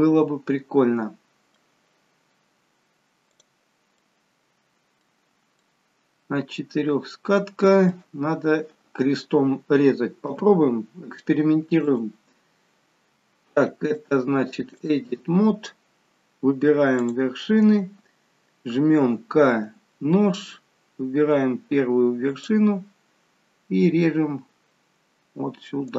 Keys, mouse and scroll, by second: 3.9 middle click, 5.6 middle click, 10.2 KP_7, 12.3 click, 13.9 click, 19.6 click, 19.6 k.